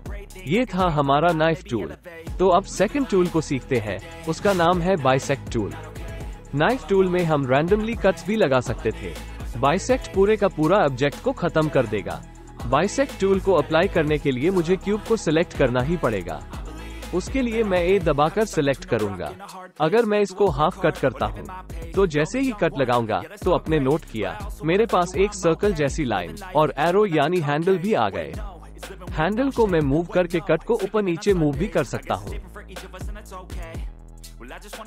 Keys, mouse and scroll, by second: 1.0 middle click, 1.2 click, 1.2 right click, 2.1 click, 2.1 right click, 6.7 ctrl+z, 8.5 alt+a, 9.9 click, 10.4-10.8 drag, 10.9 click, 17.4 a, 23.1 click, 33.0 click.